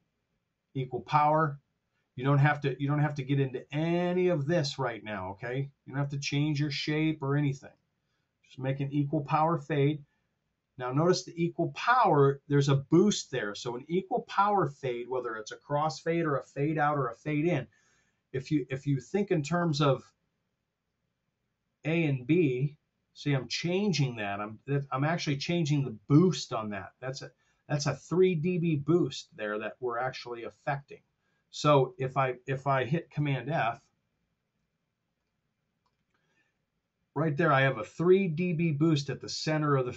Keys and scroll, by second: 33.1 super+f.